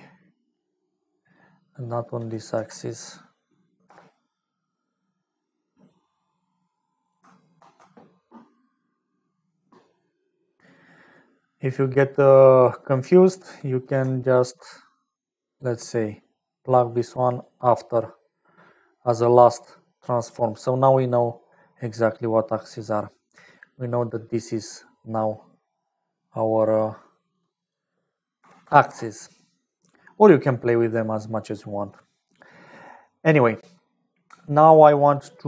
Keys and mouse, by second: 0.8 click, 7.5 ctrl+s, 12.5 click, 14.0 alt+middle click, 15.8-17.2 drag, 17.4 click, 19.0-20.0 middle drag, 20.6 click, 21.7 click, 23.5-25.1 shift+middle drag, 27.3 shift+middle click, 29.5 middle click, 30.6 middle click, 32.5 middle click, 33.4 middle click, 35.3 middle click.